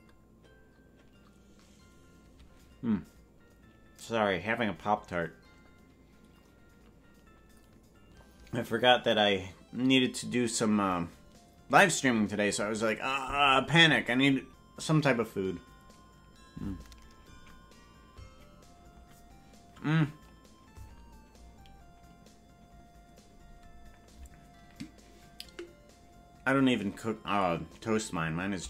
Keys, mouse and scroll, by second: 16.7-21.6 scroll down 1.